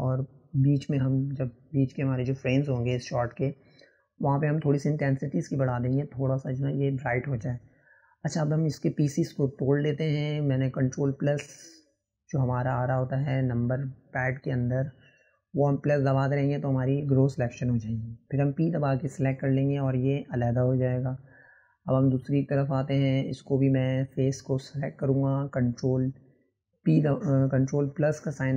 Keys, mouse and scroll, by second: 0.8-1.7 middle drag, 1.7 click, 2.9 click, 3.3 middle click, 3.7-4.1 scroll up 3, 4.1 click, 4.5 middle click, 5.4 click, 7.2-12.3 ctrl+KP_Add, 13.1 scroll down 1, 13.3-15.2 middle drag, 15.7 ctrl+KP_Add, 15.8 ctrl+KP_Add, 18.8 p, 20.1 t, 20.8 click, 22.1 click, 22.3 middle click, 23.2 click, 24.4-25.6 drag, 25.6-27.7 middle drag, 27.7 click, 28.0-28.5 middle drag.